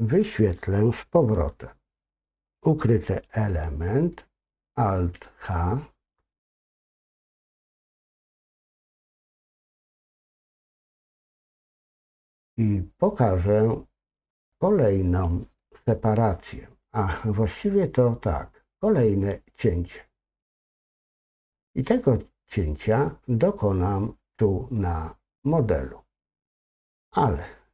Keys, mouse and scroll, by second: 12.4-14.2 middle drag, 25.2-26.7 middle drag.